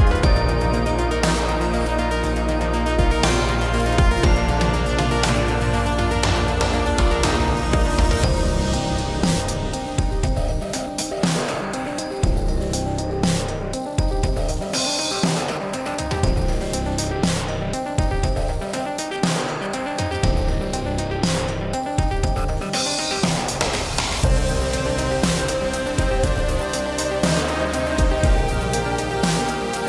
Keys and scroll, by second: 7.6 ctrl+c, 9.9 ctrl+v.